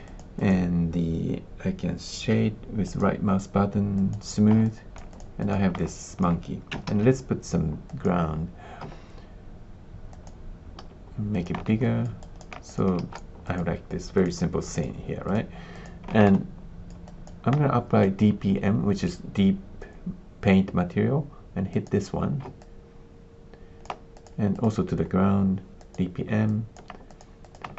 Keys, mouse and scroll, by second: 0.0 click, 0.3 click, 2.8-4.1 middle drag, 4.6 alt+click, 5.0 click, 5.3 click, 5.8 alt+click, 6.8 shift+a, 8.8 s, 10.0 click, 10.7 s, 11.8 alt+middle click, 12.1 alt+click, 12.6 click, 12.9 space, 13.4 click, 14.2 click, 14.7 click, 15.7 click, 16.2 alt+click, 17.0 alt+click, 21.8 click, 22.5-23.8 alt+drag, 24.1 click, 25.7 click, 26.4 alt+click, 27.1 click.